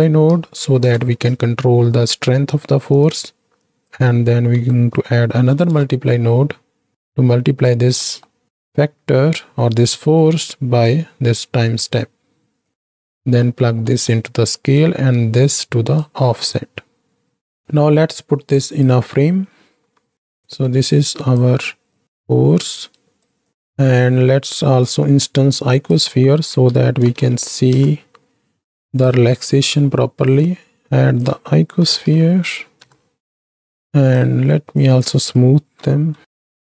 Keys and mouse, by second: 3.5-6.9 drag, 7.0 click, 7.2 click, 7.9 middle click, 11.0-12.0 drag, 12.7 drag, 13.3 middle drag, 13.9 middle click, 15.0-16.0 drag, 16.5-17.6 drag, 17.7-19.4 right drag, 19.8 ctrl+j, 20.3 click, 20.9 click, 21.9-23.2 right drag, 23.8 middle click, 25.5-28.9 drag, 29.8 click, 31.0-34.1 drag, 34.7-36.6 drag.